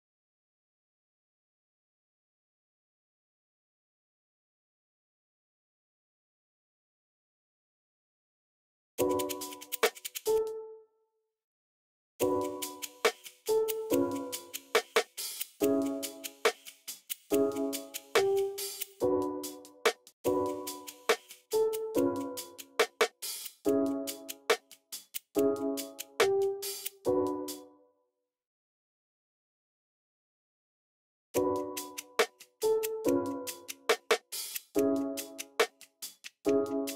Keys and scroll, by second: 0.7 v, 3.7 super+f, 8.8 space, 10.2 space, 11.9 space, 14.1 x, 17.3 x, 19.8 space, 20.0 space, 20.4 v, 25.9 super+w, 26.5 super+w, 27.3 space, 27.8 super+r, 28.8 alt+r, 31.0 alt+r, 32.1 x, 33.7 x.